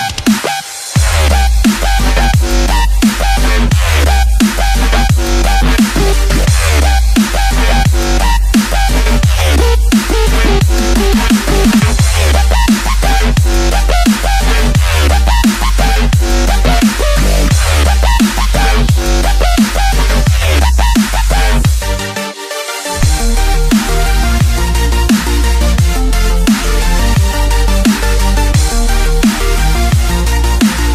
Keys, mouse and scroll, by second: 0.2 ctrl+click, 1.0 shift+click, 1.7 scroll down 2, 2.1-3.6 middle drag, 3.6 shift+click, 5.2 shift+click, 6.7 KP_7, 8.0 ctrl+j, 9.0 click, 9.4-9.7 scroll down 3, 9.7-13.3 middle drag, 17.5 KP_3, 18.2 click, 22.4 shift+d, 25.5 click, 26.1 scroll down 2, 26.3-29.9 middle drag, 30.3-30.8 scroll up 4, 30.8-30.9 middle drag.